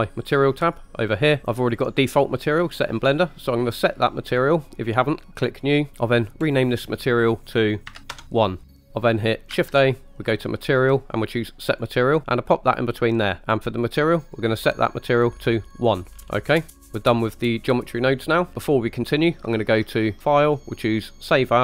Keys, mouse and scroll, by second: 0.7 click, 2.4-3.8 drag, 6.4-8.1 drag, 8.9 ctrl+z, 9.6 shift+a, 13.2 click, 14.4-15.9 drag, 16.1 scroll down 4, 16.7 middle click, 20.2-21.5 drag.